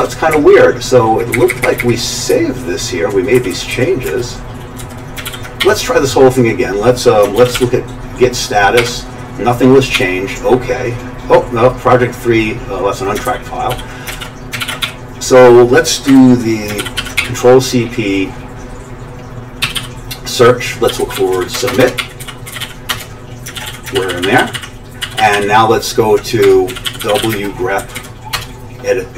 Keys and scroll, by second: 0.0 Page_Up, 0.3 Up, 0.8 Up, 0.9-1.3 Up, 1.5 Up, 1.8 Up, 2.3 Right, 2.8 Right, 2.8-4.1 typing, 3.3 Left, 4.8 Down, 5.3 ctrl+g, 5.6 q, 7.4 ctrl+x, 7.5 g, 8.8 typing, 9.9 typing, 13.3 ctrl+[, 13.7 ctrl+g, 14.1 ctrl+x, 14.6 ctrl+g, 14.8 q, 16.1 Escape, 16.8 ctrl+g, 17.0 ctrl+c, 17.2 p, 19.4-23.7 typing, 23.6 ctrl+x, 24.0 ctrl+n, 24.1 ctrl+n, 24.2 ctrl+n, 24.4 ctrl+n, 24.5 ctrl+n, 25.0 ctrl+n, 25.2 ctrl+n, 25.3 ctrl+n, 26.2-27.7 typing, 27.8 Down, 28.0 Down, 28.3 Return.